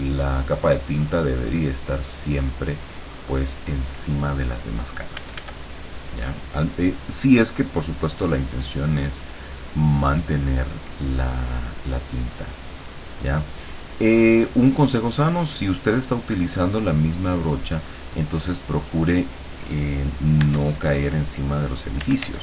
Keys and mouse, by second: 5.3 f, 5.7 click, 7.5 click, 8.6-9.9 drag, 10.1-11.9 drag, 12.2-13.8 drag, 13.9 click, 20.5 e, 22.1 d.